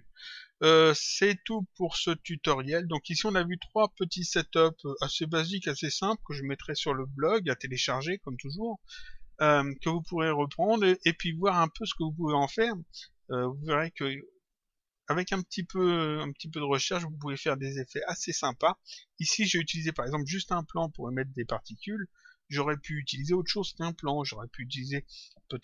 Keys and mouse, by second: 1.2 click, 3.0 click, 4.3 click, 17.5 click.